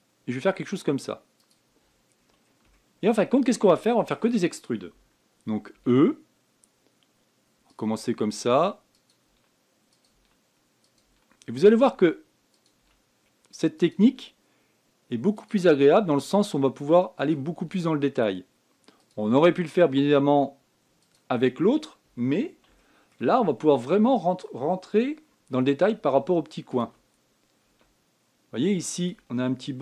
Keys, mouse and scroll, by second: 2.9 scroll up 5, 3.5 shift+middle click, 4.6-6.5 shift+middle drag, 6.5 e, 8.7 e, 10.9 e, 11.8 e, 12.7 e, 13.6 e, 14.8 e, 16.5 e, 18.4 e, 20.1 e, 22.5 scroll up 5, 23.5 shift+middle click, 24.0 shift+scroll up 4, 26.6 e, 27.5 e.